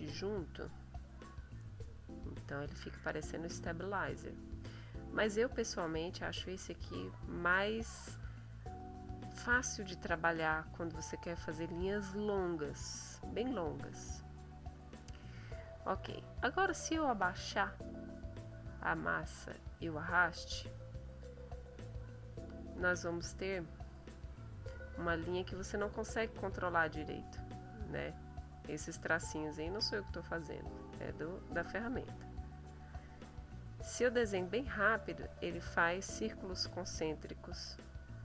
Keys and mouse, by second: 1.2-2.8 drag, 3.4-4.9 drag, 5.5-7.0 drag, 7.8-9.2 drag, 10.0 middle click, 13.2-15.0 drag, 17.0-18.2 drag, 18.6-20.4 drag, 21.5 click, 22.3 click, 23.4-33.0 drag, 33.4-38.2 drag.